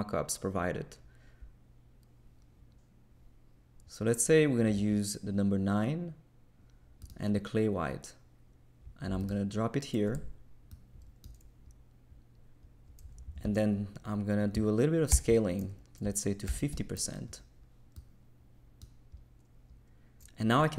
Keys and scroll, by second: 15.1 super+k, 16.2-17.0 typing.